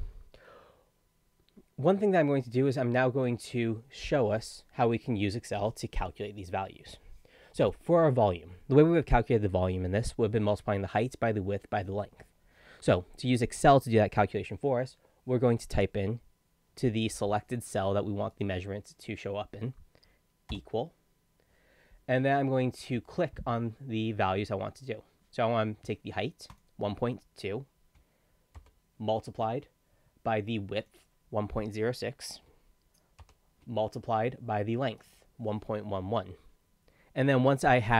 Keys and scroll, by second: 28.6 shift+8, 33.2 shift+8.